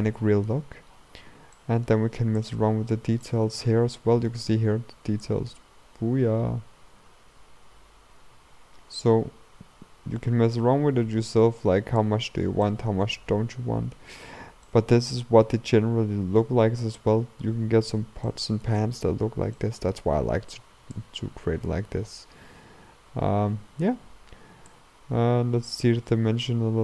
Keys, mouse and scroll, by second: 2.7 click, 3.3-5.4 middle drag, 5.4-8.3 drag, 12.4-12.7 scroll down 2, 12.7-14.3 middle drag, 14.3-14.7 scroll up 2, 14.7-16.7 middle drag, 16.7-17.3 scroll up 1, 17.3 scroll up 1, 17.5-18.3 scroll down 6, 18.3 middle click, 18.9-19.6 scroll up 4, 19.6-21.1 shift+middle drag, 21.1-24.0 shift+drag, 25.0-26.8 drag.